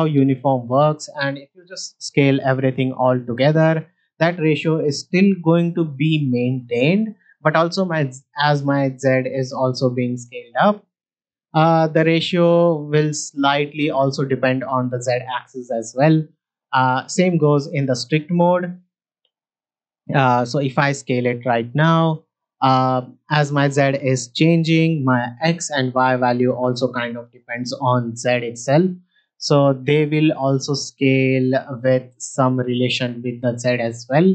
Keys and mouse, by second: 1.1 middle click, 2.3 s, 6.9-8.7 right drag, 10.5 s, 16.8-17.6 drag, 19.0 shift+middle drag, 19.8 s, 27.7 s, 31.9-33.7 right drag, 34.0 Escape.